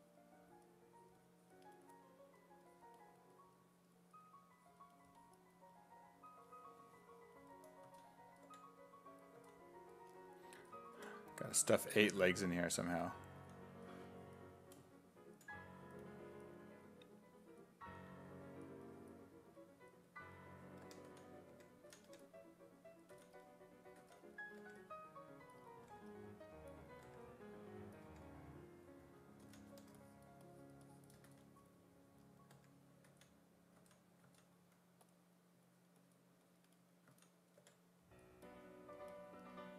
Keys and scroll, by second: 7.9 s, 8.5 5, 9.4 s, 10.6 s, 11.0 5, 13.4 s, 20.6-24.6 typing, 25.9 1, 27.0 1, 28.1 1, 29.5 s, 29.8 3, 31.3 s, 32.5 1, 33.1 s, 33.8 s, 34.3 s, 37.1 s, 37.6 5.